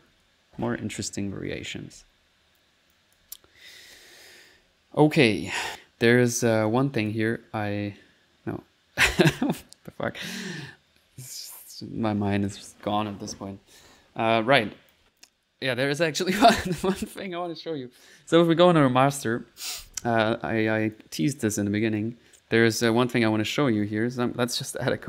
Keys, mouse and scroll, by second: 0.0-2.0 typing, 2.9 middle click, 3.0 click, 4.6-5.2 typing, 5.7 click, 6.7 click, 8.4 middle click, 14.4 click, 15.8 middle click, 17.0 click, 17.3 click, 17.7 click, 20.9 click, 21.3 click, 21.9 click, 22.9 middle click, 23.8 right click, 24.2 click, 24.3-25.0 typing.